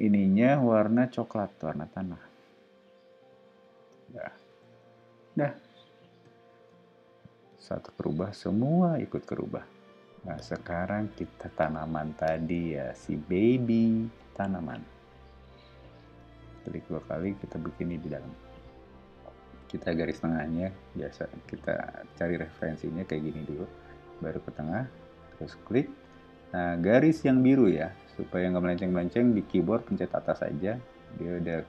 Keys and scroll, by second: 3.7 space, 4.2 ⟲, 5.0 o, 15.3 l, 16.0 space, 18.2 l, 29.8 Up, 30.0 Down.